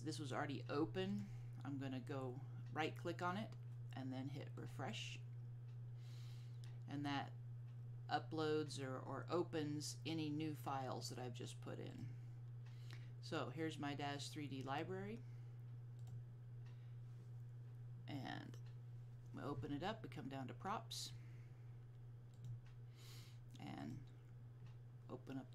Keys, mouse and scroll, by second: 1.2-2.5 drag, 4.8 click, 12.0 click, 16.2 click, 18.5 scroll down 1, 21.6-22.2 scroll down 1, 22.2 scroll down 1, 22.5 click.